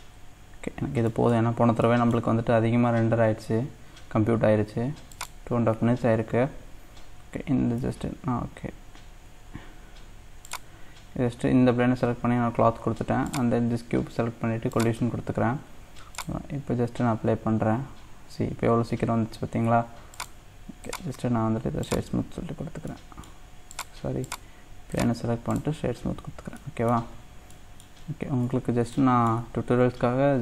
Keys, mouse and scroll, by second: 0.8-1.1 scroll up 1, 1.1 middle click, 1.5-1.8 scroll down 1, 2.4-3.6 scroll up 1, 3.6-5.1 scroll up 1, 7.8 Tab, 10.4-13.3 drag, 14.7-19.2 drag, 20.1 click, 20.9-22.3 right drag, 22.3-23.0 scroll up 1, 23.0 middle click, 23.7 click, 24.3 click, 24.9-26.0 right drag, 26.0-26.6 scroll down 2, 26.6 middle click, 27.1 scroll up 2, 27.5-30.2 middle drag, 30.2 scroll down 2.